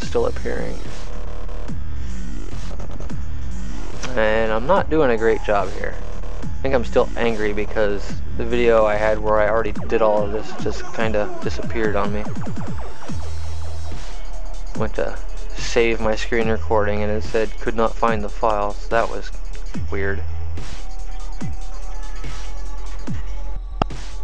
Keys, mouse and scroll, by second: 4.1 click, 9.9 click, 13.7 click, 15.6 click, 21.8 click, 22.7 click, 23.0 click.